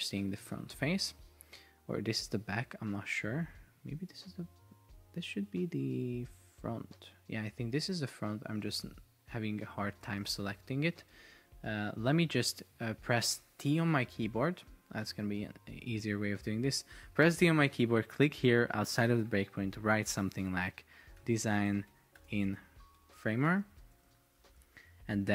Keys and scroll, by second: 11.2 Escape, 13.5 Escape, 15.2 Delete, 20.9-24.7 typing.